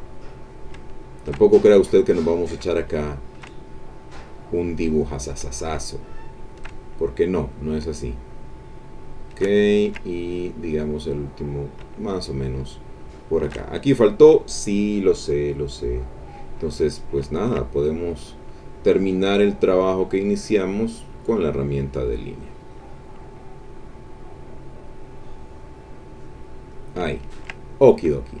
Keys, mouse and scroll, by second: 0.5 shift+click, 2.5-3.5 shift+drag, 5.2-6.2 shift+drag, 7.6-9.5 shift+drag, 9.6 ctrl+shift+click, 10.2 ctrl+shift+middle click, 11.6-13.6 shift+drag, 16.9-18.1 drag, 18.1 ctrl+middle click, 19.5-21.5 drag, 22.0 middle click, 22.6 middle click, 23.2 middle click, 24.6-26.9 drag, 27.1 ctrl+middle click, 27.1-27.6 ctrl+scroll up 1, 27.8 ctrl+middle click, 27.8-28.4 ctrl+scroll up 1.